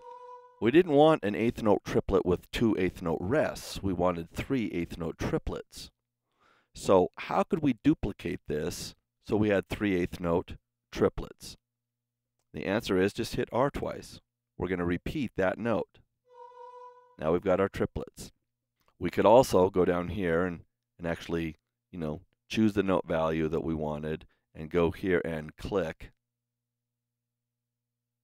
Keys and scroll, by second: 16.1 r, 18.6 super+z.